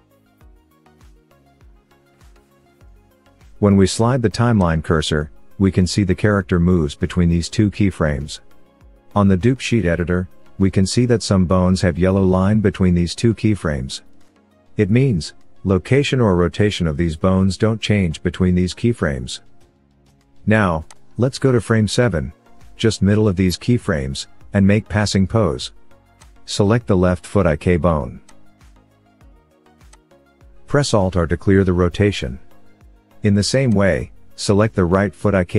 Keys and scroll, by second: 31.4 alt+r, 35.0 alt+r.